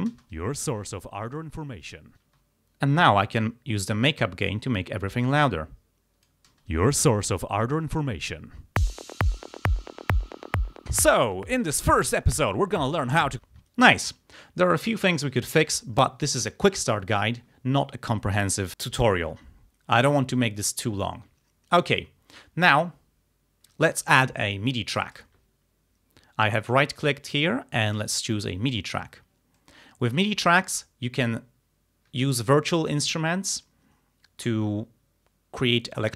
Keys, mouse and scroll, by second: 0.2 space, 2.3 space, 3.4-6.5 drag, 6.5 space, 13.5 space, 15.7 click, 25.2 right click, 28.0 click, 29.6 click.